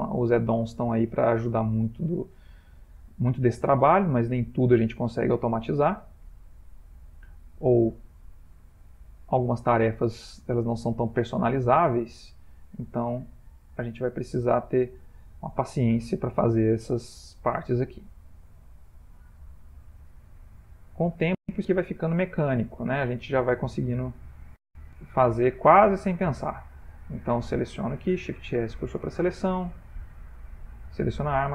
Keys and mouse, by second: 1.3 middle click, 3.9 shift+s, 6.0 shift+middle click, 6.2 shift+middle click, 6.9 middle click, 7.2 middle click, 7.5 shift+middle click, 7.8 Tab, 8.1 click, 9.1 Tab, 10.1 Tab, 11.5 shift+s, 12.8 Tab, 13.4 middle click, 14.1 Tab, 14.6 click, 15.8 Tab, 16.5 click, 17.6 shift+s, 19.7 middle click, 21.5 Tab, 21.9 click, 22.7 click, 23.7 middle click, 24.4 middle click, 24.5 middle click, 24.6-25.3 middle click, 24.9 middle click, 26.2 middle click, 26.8 click, 28.0 shift+s, 29.4 Tab, 29.9 Tab, 30.3 click, 30.8 Tab, 31.4 click.